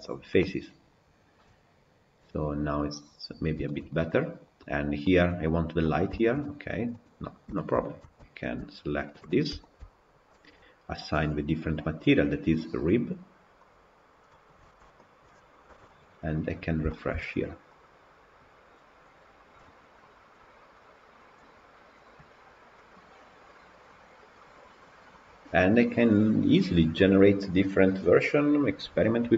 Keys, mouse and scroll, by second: 3.3-3.6 scroll up 1, 3.6-5.7 shift+middle drag, 5.7-6.0 scroll down 6, 6.0-6.9 shift+middle drag, 6.9 click, 7.1 scroll up 2, 7.4-7.7 shift+middle drag, 7.7-8.1 scroll up 1, 8.1 Tab, 9.3 3, 9.6 alt+click, 12.7 click, 13.8 click, 14.2 middle click, 14.7 Tab, 14.9 click, 15.6 KP_Decimal, 16.1-16.8 scroll up 2, 16.8-22.1 shift+middle drag, 22.5 scroll down 2, 22.7-25.7 middle drag.